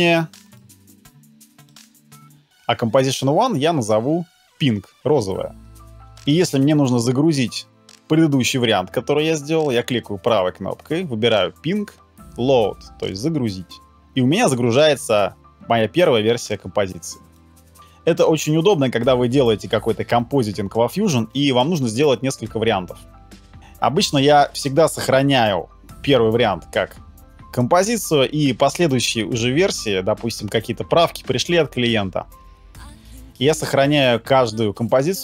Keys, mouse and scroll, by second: 1.7 right click, 5.1 p, 9.8 right click.